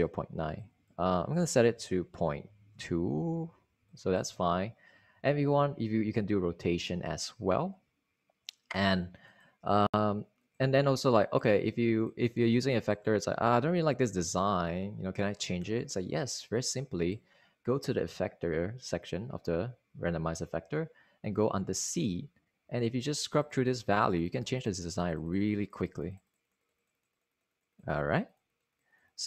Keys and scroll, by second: 2.6 2, 3.3 Return.